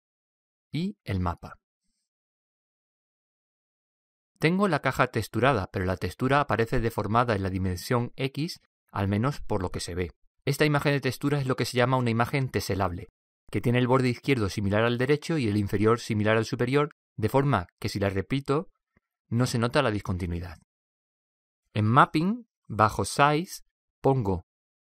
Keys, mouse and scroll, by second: 1.6 click, 6.0-7.9 middle drag.